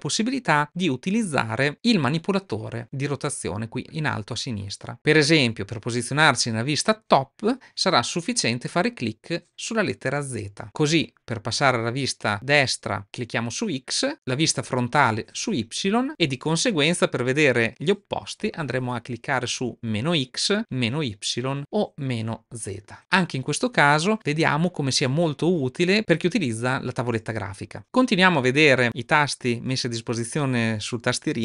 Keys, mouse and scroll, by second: 14.8 click, 21.3 drag.